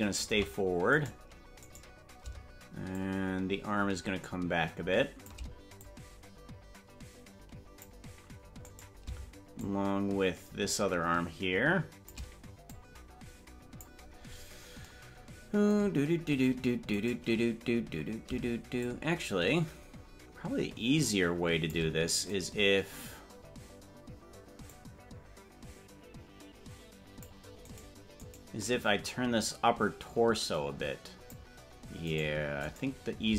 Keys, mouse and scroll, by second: 1.1 right click, 1.9 right click, 3.0-5.4 shift+drag, 5.8-7.9 drag, 8.9 right click, 9.6-12.2 shift+drag, 12.7-14.0 drag, 14.6 scroll up 5, 17.2 right click, 18.8-21.9 shift+drag, 22.6 right click, 24.7-27.4 drag, 28.0 right click, 28.4 right click, 29.4-31.4 drag, 32.4 right click, 32.8 right click.